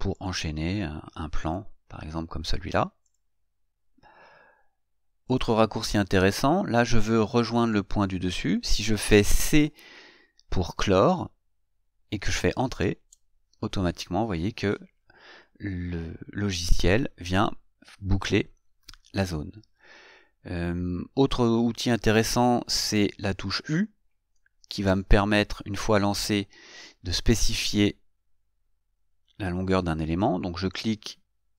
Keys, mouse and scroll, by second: 0.4 click, 1.7 click, 3.3 click, 11.1 c, 24.3 u, 31.0 click.